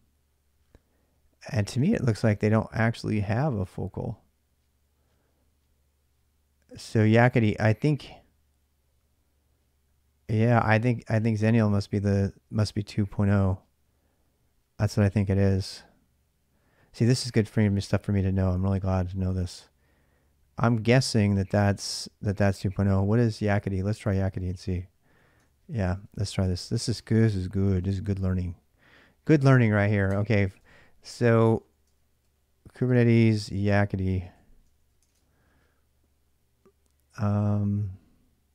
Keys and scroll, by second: 25.3 ctrl+a, 25.4 ctrl+a, 26.6 ctrl+[, 26.8-34.7 typing, 30.4 Return, 31.7 ctrl+[, 34.9 super+Tab.